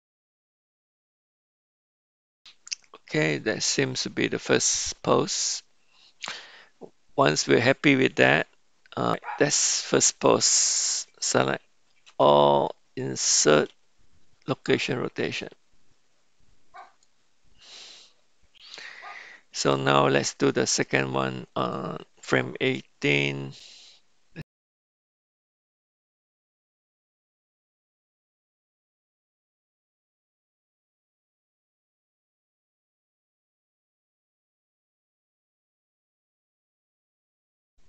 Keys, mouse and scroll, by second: 0.7 r, 1.1 r, 1.6 click, 12.2 a, 13.7 i, 21.6 click, 23.3 Right, 24.7-25.1 middle drag, 25.1 KP_1, 25.7 r, 25.9 g, 26.9 g, 29.1 g, 30.1 r, 31.5 click, 31.8 g, 32.6 click, 32.9 r, 34.3 r, 34.8 r, 36.7 r, 37.4 a, 37.7 i.